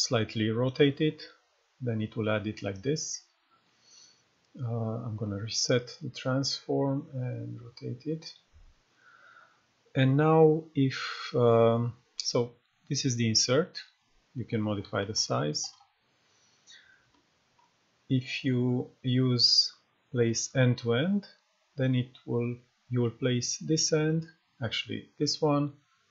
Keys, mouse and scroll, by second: 3.3 right click, 5.1 click, 6.3-7.1 scroll up 1, 7.1 click, 7.6 scroll up 1, 8.1-8.9 scroll down 1, 12.1-17.8 drag, 14.3-15.5 typing, 17.0 [, 18.4-20.3 drag.